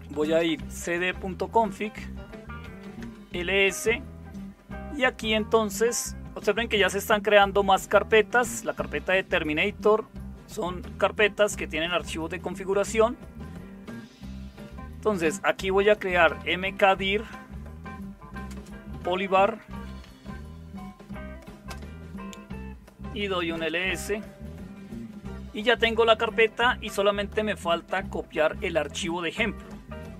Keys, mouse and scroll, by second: 0.0-3.3 typing, 15.8-17.3 typing, 18.4-21.6 typing, 22.9-23.9 typing.